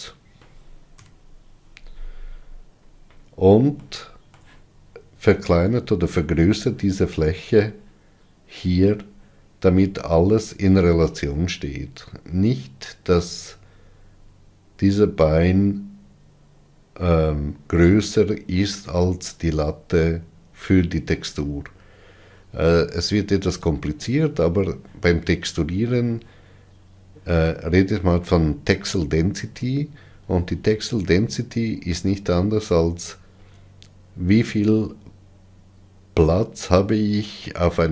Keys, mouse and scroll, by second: 1.7 KP_Divide, 3.0-3.9 scroll down 10, 4.5-10.1 shift+middle drag, 10.1 scroll down 3, 14.1-19.6 scroll up 3.